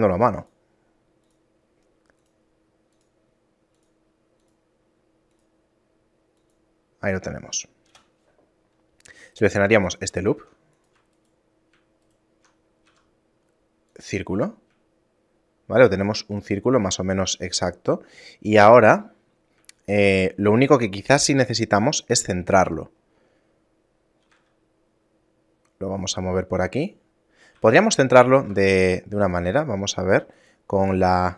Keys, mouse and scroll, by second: 9.4 alt+right click, 10.3 ctrl+Tab, 11.2 alt+right click, 12.1 alt+shift+right click, 12.9 w, 15.0 shift+middle click, 19.9 shift+middle click, 21.3 KP_7, 22.5 scroll up 4, 23.0 scroll down 1, 23.5 middle click, 24.3 g, 27.6 a, 28.3 middle click, 28.6 ctrl+Tab, 31.1 right click.